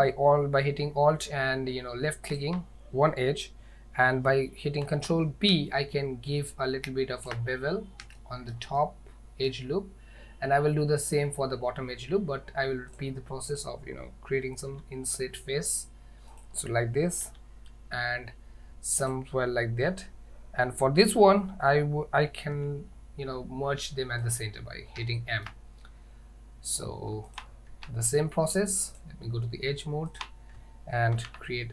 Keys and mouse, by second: 4.9 ctrl+b, 8.3 shift+middle click, 8.8 middle click, 13.0 click, 14.8 i, 17.3 i, 22.6 m, 25.2 shift+middle click, 27.3 alt+click, 29.0 click, 30.1 alt+click, 31.3 ctrl+b.